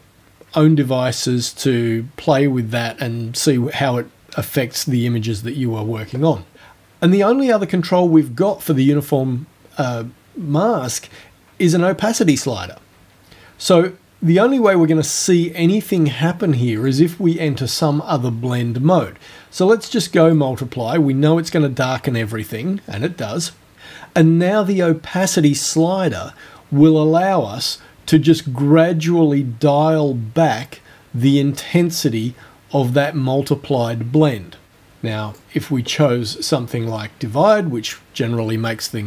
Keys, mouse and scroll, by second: 16.8 click, 20.3 click, 27.0-35.5 drag, 35.9 click, 37.5 click.